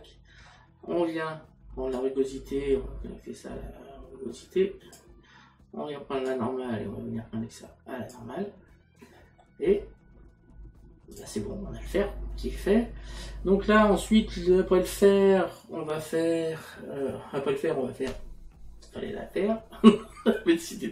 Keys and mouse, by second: 6.3 click, 9.2 middle click, 11.2 click.